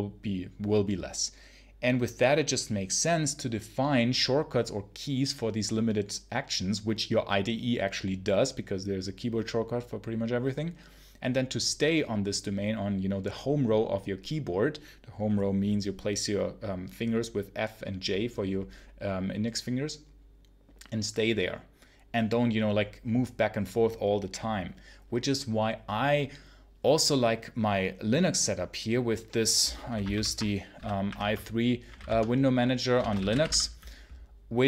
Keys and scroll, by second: 30.0 ctrl+super+l, 30.6-33.8 typing.